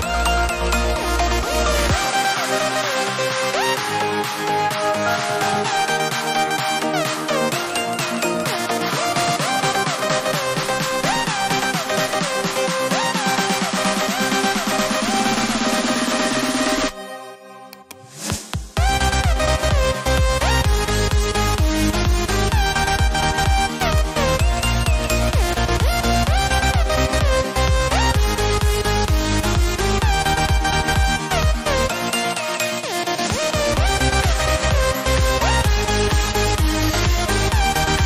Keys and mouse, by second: 0.5 KP_Enter, 9.6 click, 15.3 click, 22.6 click, 29.1 click, 32.4 click.